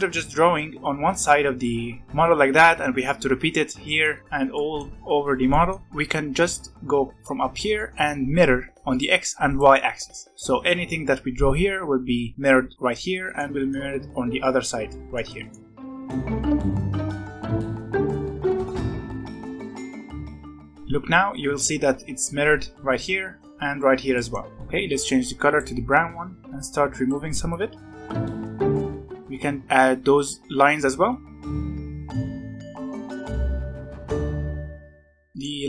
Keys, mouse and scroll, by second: 2.1-3.8 scroll down 3, 4.0-5.1 middle drag, 5.1 scroll down 1, 5.4-5.8 middle drag, 5.8-6.6 scroll down 1, 6.9-8.9 scroll down 7, 8.9 click, 9.4 click, 10.3-11.4 scroll up 3, 11.4-12.2 scroll down 5, 12.9-15.9 middle drag, 15.9 scroll up 1, 16.0 middle click, 16.6-17.1 scroll up 3, 16.7 shift+middle click, 17.1 e, 17.4 e, 17.9 click, 18.2-18.6 scroll up 2, 18.6 click, 19.1 click, 19.6 scroll up 1, 19.9-20.6 drag, 20.6-21.6 shift+middle drag, 21.6-22.6 scroll up 2, 22.6 scroll down 4, 22.9-24.4 middle drag, 24.4-25.1 scroll up 1, 25.4 click, 26.4-27.9 drag, 28.1 click, 28.4 scroll down 6, 28.6 middle click, 28.8 scroll up 1, 28.9-30.0 shift+middle drag, 31.0 middle click, 31.4 scroll up 1, 31.7 click, 32.1 e, 32.4 click, 32.8 click, 32.8 shift+middle click, 32.9 scroll up 2, 33.1 click, 33.3 ctrl+z, 33.4 f, 33.5 click, 34.4 f, 34.6 click, 34.7 click, 34.9 middle click, 35.2 scroll up 1, 35.4 middle click.